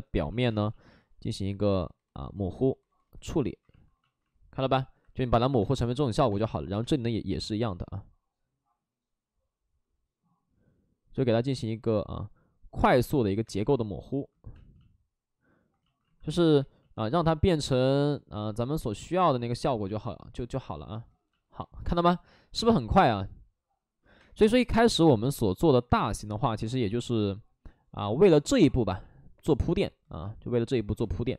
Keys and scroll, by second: 0.4 space, 5.5 space, 6.7 space, 13.4 space, 14.5 space, 16.5 space, 22.5 space, 24.1 space, 25.2 space.